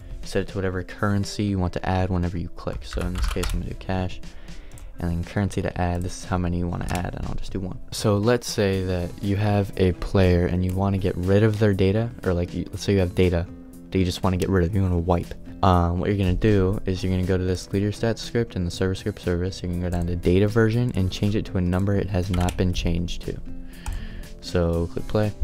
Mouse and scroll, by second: 10.7-25.4 drag.